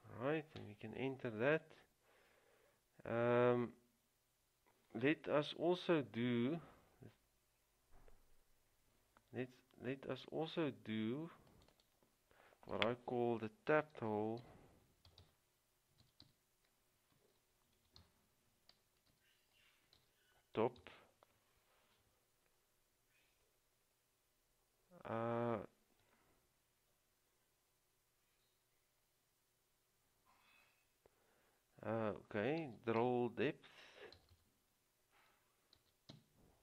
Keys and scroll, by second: 0.7 Return, 14.1-14.6 typing, 16.1-21.5 typing, 32.6-34.5 typing, 36.0-36.6 typing.